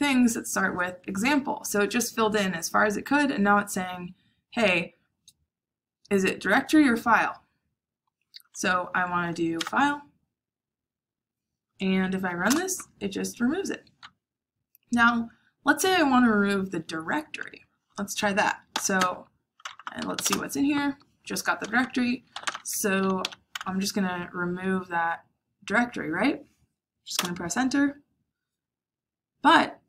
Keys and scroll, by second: 9.2 f, 9.5 Tab, 12.4 Return, 18.4-23.5 typing, 25.3 typing, 27.1 Return.